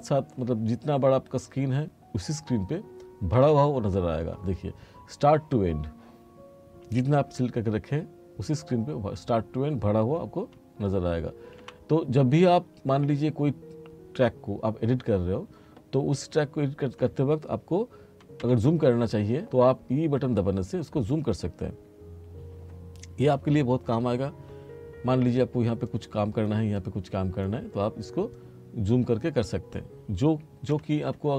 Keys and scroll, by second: 3.4 e, 11.7 e, 18.5 e, 30.8 e.